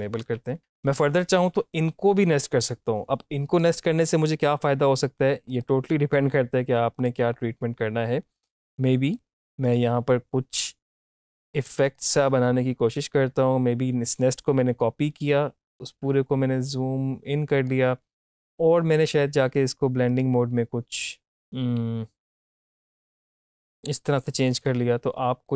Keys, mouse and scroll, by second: 0.2 shift+click, 0.5-5.5 drag, 1.1-3.2 drag, 5.5 click, 11.0 alt+click, 15.9-19.9 drag, 20.1 click, 22.5-25.5 drag.